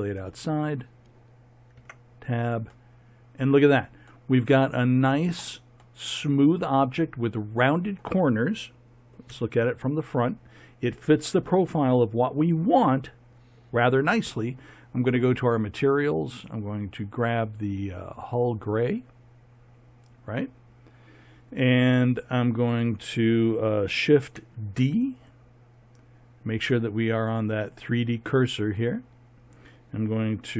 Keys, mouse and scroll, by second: 1.8 Tab, 5.8-6.3 middle drag, 6.4 middle click, 6.8-7.5 middle drag, 9.3 KP_3, 24.4 shift+d.